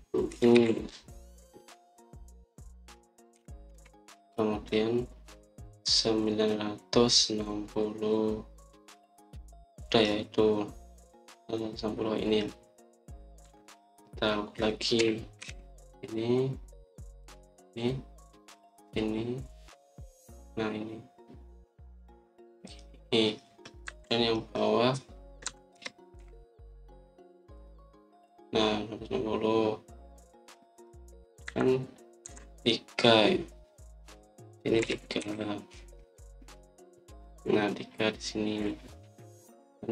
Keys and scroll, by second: 0.3-1.2 typing, 4.2 0, 4.6 Return, 14.4 Escape, 15.9-16.3 typing, 19.1-19.9 typing, 24.8 Escape, 26.3 Escape, 26.6-27.1 typing, 32.3 Escape, 33.1 Escape, 35.7-36.1 typing.